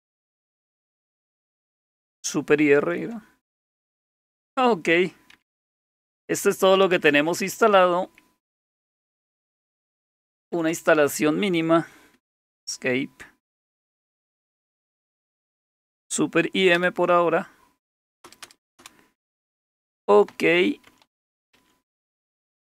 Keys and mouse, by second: 0.2 super+e, 2.8 super+r, 5.4 Down, 5.6 Down, 5.7 Down, 5.9 Down, 6.1 Down, 6.8 Up, 7.0 Up, 7.1 Up, 7.3 Up, 7.5 Up, 7.6 Up, 8.5 Down, 8.7 Down, 8.8 Down, 9.0 Down, 9.2 Down, 9.4 Down, 9.9 Up, 10.0 Up, 10.2 Up, 10.4 Up, 10.6 Up, 10.7 Up, 12.2 Escape, 16.7 super+m, 18.3 Return, 18.5 Return, 18.6 Return, 18.8 Return, 20.3-22.7 typing.